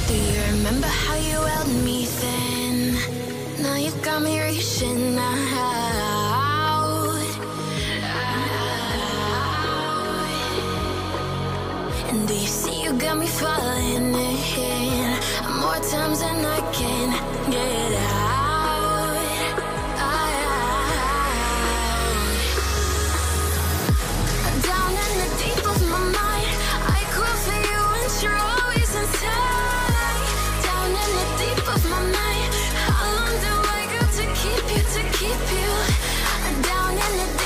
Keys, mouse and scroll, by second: 15.4-18.5 scroll down 1, 30.2-30.5 alt+scroll up 1, 30.5 space, 32.3 double click.